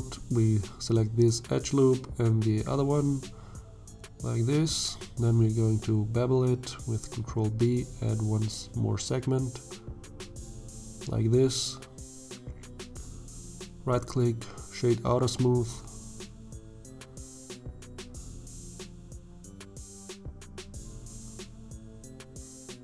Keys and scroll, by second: 6.1 ctrl+b, 10.9 Tab, 16.3 Tab, 20.6 alt+a, 22.5 1.